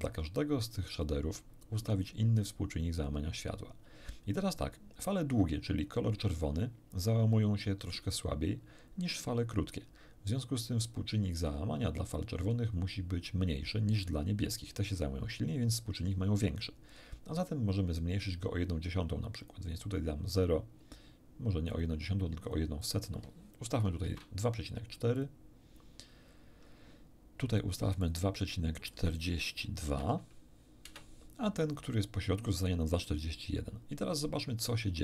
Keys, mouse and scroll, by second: 19.4 click, 21.7 click, 22.4 click, 24.0 BackSpace, 25.1 click, 28.0 click, 28.4 click, 29.9 BackSpace, 29.9 2, 30.9 Return.